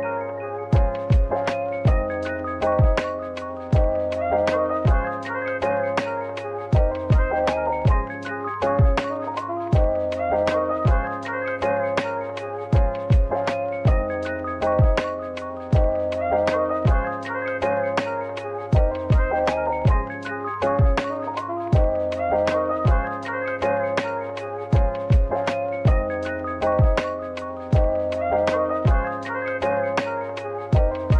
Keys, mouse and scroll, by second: 0.9 a, 1.6 ctrl+b, 4.5 double click, 5.7 3, 6.4 shift+click, 9.9 middle click, 11.4 scroll down 1, 11.7 ctrl+r, 12.6-13.6 scroll up 1, 13.6-14.0 scroll down 1, 14.2 double click, 15.5 middle click, 15.8-16.9 typing, 17.0 shift+click, 24.6 shift+click, 24.7 middle click, 26.0 shift+click, 29.1 middle click, 30.4 shift+click.